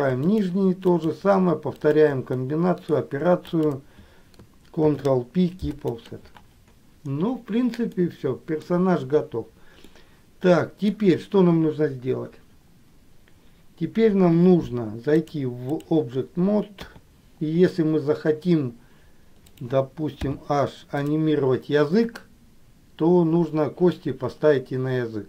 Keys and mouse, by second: 0.4 shift+click, 1.2 shift+click, 2.0 shift+click, 2.7 middle click, 3.8 shift+click, 5.0 ctrl+p, 8.3 middle click, 10.2 middle click, 15.4 click, 17.0 KP_3, 20.5 h, 21.2 click.